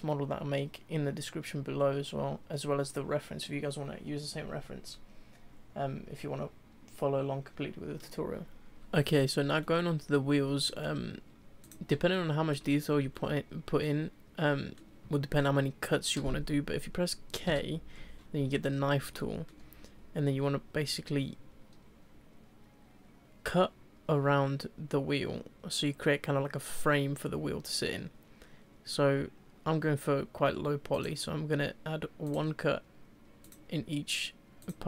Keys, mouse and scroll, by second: 0.0-3.7 middle drag, 5.3 scroll down 1, 5.6-6.2 scroll up 1, 6.2-8.6 shift+middle drag, 8.7 middle click, 9.6-11.6 middle drag, 11.6 click, 12.1 shift+middle click, 12.7-13.1 scroll down 1, 13.1-17.5 shift+middle drag, 17.5 k, 18.4-18.9 scroll up 2, 19.1-22.3 shift+middle drag.